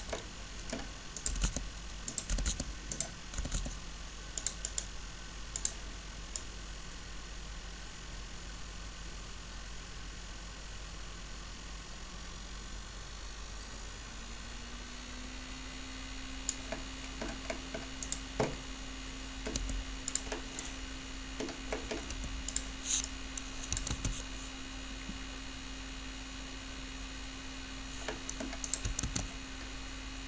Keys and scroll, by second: 1.2-3.5 typing, 19.5 r, 22.1 r, 23.9 alt+a, 28.9 alt+a.